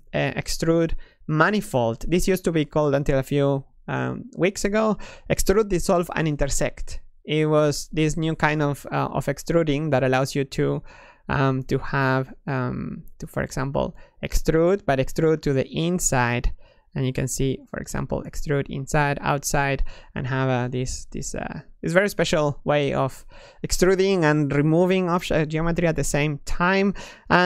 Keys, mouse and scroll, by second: 1.2-4.2 drag, 8.2-9.3 middle drag, 9.3 3, 9.7 click, 10.4 e, 12.1-13.5 drag, 16.6 s, 17.5 click, 19.3-21.6 middle drag, 21.6-24.7 drag.